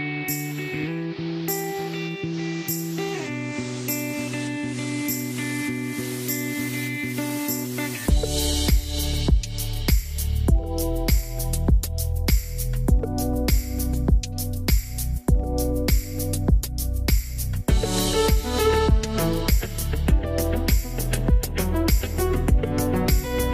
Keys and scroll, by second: 3.1-4.0 typing, 11.1-12.0 typing, 18.3 9, 18.7 Return.